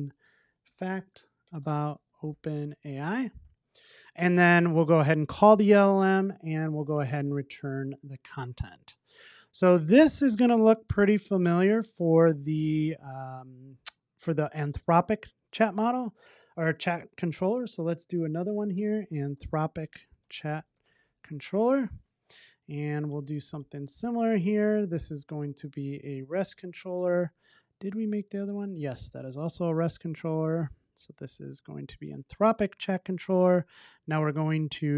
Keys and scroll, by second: 5.1 Return, 7.8 super+s, 12.6 super+c, 23.9 super+v, 26.4 Return, 32.1 Return.